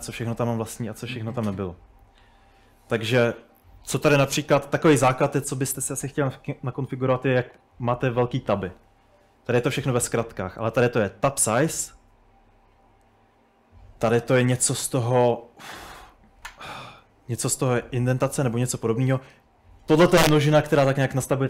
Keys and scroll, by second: 0.0-1.0 typing, 1.5 Return, 2.2-6.4 typing, 9.3 Escape, 9.4-11.6 typing, 13.6-15.2 typing, 18.5-19.9 typing.